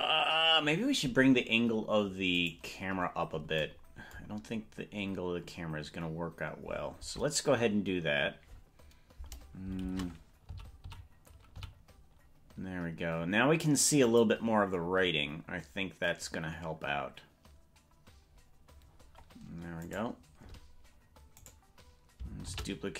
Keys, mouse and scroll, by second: 2.6 right click, 4.4-4.8 scroll down 4, 4.8 scroll up 3, 5.0 scroll down 1, 5.4-5.8 scroll down 2, 5.6 scroll up 1, 6.0 scroll down 1, 9.8 shift+`, 19.8 right click, 21.4 right click, 22.4 shift+d.